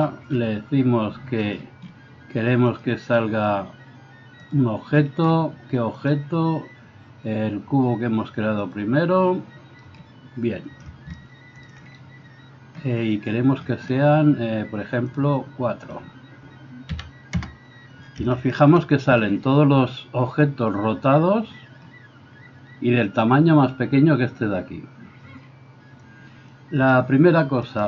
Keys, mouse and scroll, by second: 15.2 middle click, 15.8-27.8 drag, 27.7 middle click, 27.7 right click.